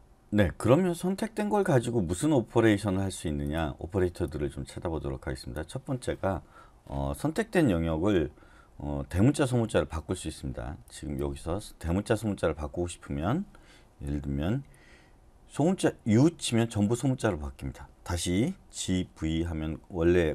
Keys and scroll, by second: 16.1 u, 18.7-19.8 typing.